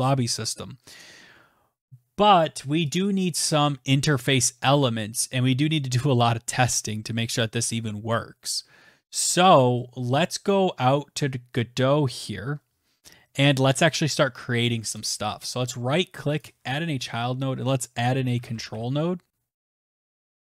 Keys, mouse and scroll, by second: 0.5 ctrl+s, 12.0 click, 12.0 right click, 13.4 click, 15.0-16.2 typing, 17.8-18.5 typing, 18.7 Return, 19.5 right click, 20.0 click, 20.4 click.